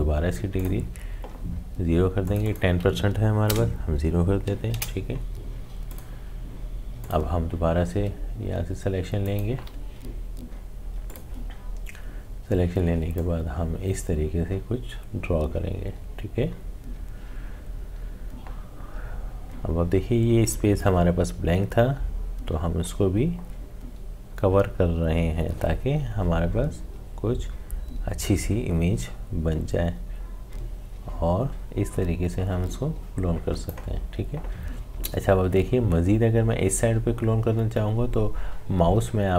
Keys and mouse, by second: 5.8-23.2 drag.